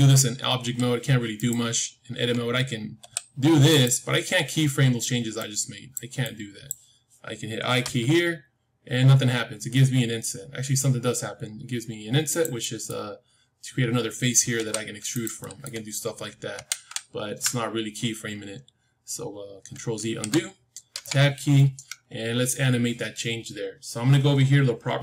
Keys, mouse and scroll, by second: 0.5 s, 2.1 Tab, 2.9 s, 5.3-8.6 drag, 7.8 i, 12.5-15.0 middle drag, 14.5 e, 15.3-17.3 middle drag, 16.5 ctrl+z, 16.8 ctrl+z, 19.9 ctrl+z, 20.8 Tab, 21.5-23.5 middle drag.